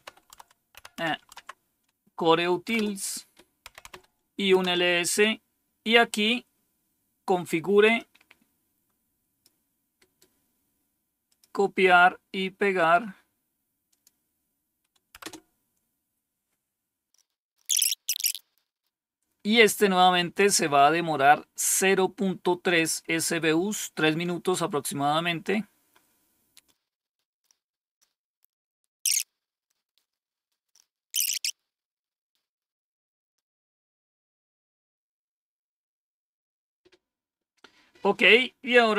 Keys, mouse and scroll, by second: 0.0-1.2 typing, 2.6-4.5 typing, 7.8-9.3 drag, 9.9 right click, 11.1 click, 12.6 right click, 13.8 click, 15.1 Return, 17.9-26.9 scroll down 1, 26.9 scroll down 1, 38.8-38.9 typing.